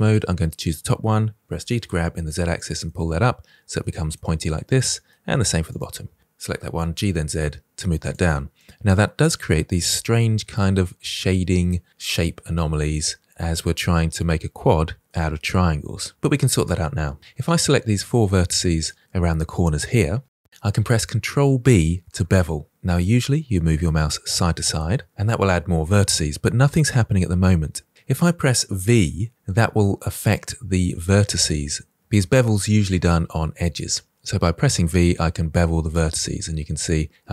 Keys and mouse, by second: 1.4 g, 1.8 z, 2.5 click, 2.8 middle click, 4.1 shift+middle click, 4.7 middle click, 5.6 click, 6.4 g, 6.6 z, 7.3 click, 7.6-10.8 middle drag, 12.4-15.8 middle drag, 17.2 ctrl+z, 19.3 shift+click, 22.1 ctrl+b.